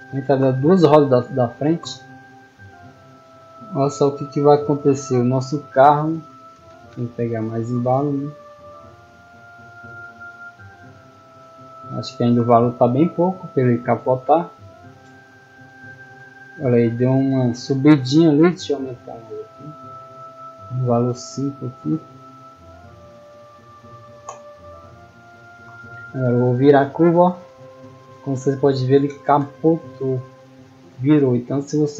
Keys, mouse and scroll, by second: 2.1-3.7 typing, 6.8 middle click, 7.3 right click, 7.5 s, 8.3 click, 9.1 click, 9.7 middle click, 9.9 middle click, 11.1 middle click, 11.4 middle click, 12.3-13.2 typing, 14.9 d, 16.6 a, 19.2 click, 19.7 click, 24.4-25.1 typing, 27.1 a, 29.5-30.4 typing, 31.7 a.